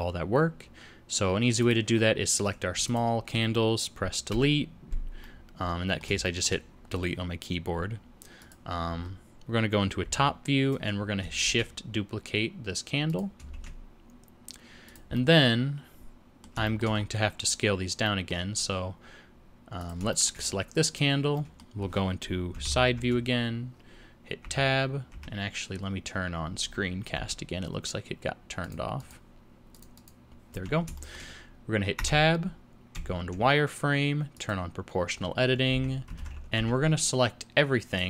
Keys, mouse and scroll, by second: 30.5 n, 31.0 shift+middle click, 32.0 Tab, 32.9 z, 34.3 click, 35.7 2, 36.2 alt+a, 36.5 b.